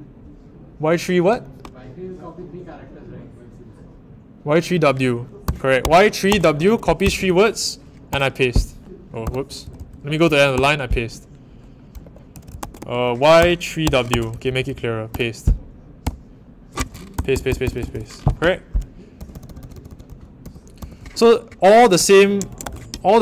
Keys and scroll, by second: 5.2-10.5 typing, 11.7-16.0 typing, 16.8 Home, 17.1-17.9 typing, 19.1 shift+', 21.9 ctrl+r, 22.2-23.1 typing.